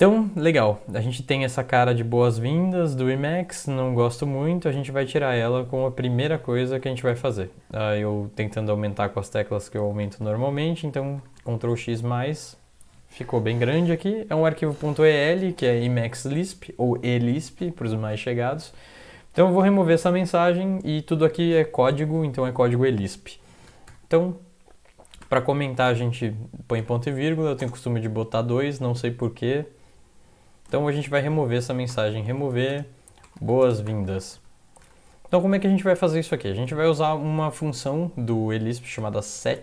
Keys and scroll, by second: 4.7 super+Up, 6.0 ctrl++, 6.2 ctrl++, 6.4 ctrl++, 6.5 ctrl++, 9.8 ctrl+x, 10.2 ctrl+=, 10.4 ctrl+=, 10.6-11.7 ctrl+=, 23.7 typing, 25.2 typing, 26.8-27.6 typing, 30.7-34.8 typing, 36.1-36.8 typing, 36.9 Left, 38.8-39.6 typing.